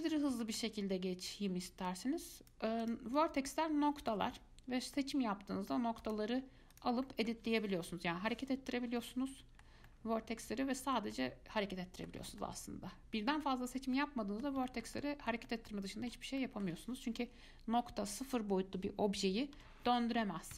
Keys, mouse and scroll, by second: 2.1 click, 3.0 click, 3.4 click, 5.2-6.2 middle drag, 6.2 click, 6.9 click, 7.3 shift+middle click, 8.0 g, 9.2-14.0 middle drag, 14.0 scroll up 2, 14.2-19.6 middle drag, 19.8 r.